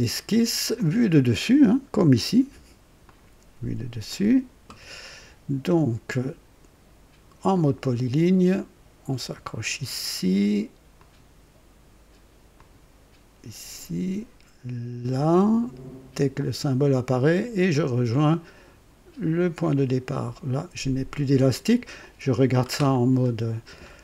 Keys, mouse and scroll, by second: 0.1 click, 0.7 click, 3.0 click, 4.1 click, 7.5 click, 10.9 click, 12.5 click, 16.3 click, 19.6 click, 21.9 click, 22.9-24.0 scroll up 3.